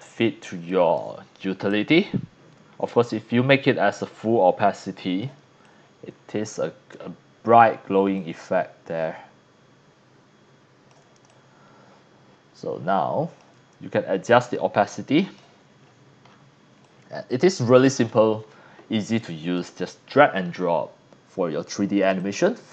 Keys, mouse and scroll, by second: 0.6-1.0 drag, 1.7-5.2 drag, 5.4 c, 5.6-6.9 drag, 8.1-10.9 drag, 11.1 c, 11.3-13.4 drag, 14.3-15.4 drag, 15.8 scroll down 2, 16.2-16.6 scroll up 4, 16.7 c, 16.8-18.0 drag, 18.4 scroll up 2, 19.1 x, 19.2 click, 22.1 click.